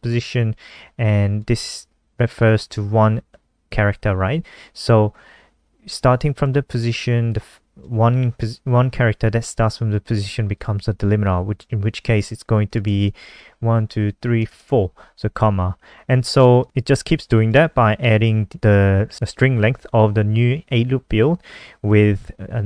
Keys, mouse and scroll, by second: 0.5 click, 13.0 Left, 13.3 Right, 13.6 Right, 13.9 Right, 16.4 click.